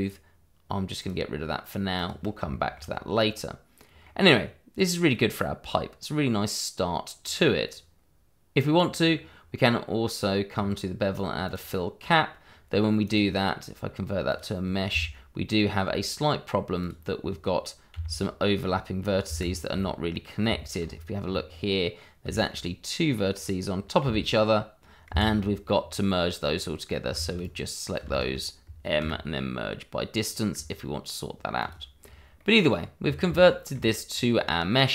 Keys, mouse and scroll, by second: 1.0 click, 2.5 shift+middle click, 2.9 scroll up 1, 3.2 middle click, 9.0 click, 11.0-11.6 scroll down 1, 11.6 click, 13.0 right click, 14.3 click, 14.9 Tab, 16.8 click, 17.9 g, 19.2 Escape, 20.5 shift+middle click, 20.8-21.5 shift+scroll up 2, 21.5 middle click, 22.3 shift+middle click, 22.6 middle click, 23.1 scroll up 1, 24.0 g, 25.1 Escape, 25.3-25.7 scroll down 1, 26.5 middle click, 27.1 shift+z, 27.4 click, 28.0 shift+z, 29.0 m, 31.6 click, 32.0-32.3 scroll down 1, 32.4 middle click, 32.8 scroll up 1, 33.0-33.4 scroll down 1, 33.4 shift+middle click, 34.1-34.4 scroll down 1, 34.4 middle click.